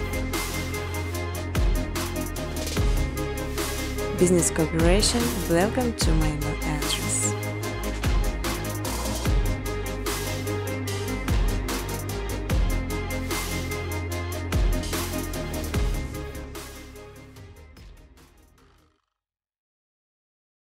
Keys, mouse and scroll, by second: 0.0-2.4 typing, 1.5 click, 3.7 space, 7.1 click, 7.5 space, 9.9 space, 10.3 space, 12.0 space, 12.8 click, 13.2 click, 13.7 n, 14.2 click, 14.5 space, 18.2-20.3 typing, 18.8 click, 19.2 click.